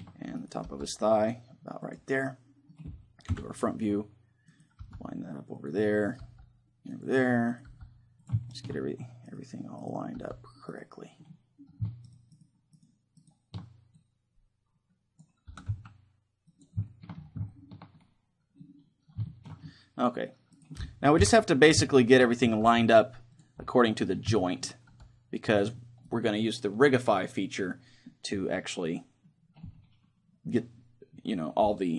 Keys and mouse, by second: 0.7 g, 2.0-3.9 drag, 2.2 middle click, 3.4 KP_1, 4.5-5.7 right drag, 4.8 g, 6.2 g, 7.7 g, 9.6 click, 10.2-11.3 right drag, 10.2 g, 11.3 click, 11.3-12.9 middle drag, 12.2-14.0 right drag, 15.2 click, 15.5 r, 16.6-18.4 drag, 18.4-20.6 middle drag, 20.6 right click, 20.9 click, 20.9-26.0 middle drag, 21.2 KP_3, 22.0 click, 22.7 g, 23.4-25.3 drag, 24.9 g, 25.6-27.4 drag, 26.1-30.6 right drag, 27.8-29.5 middle drag.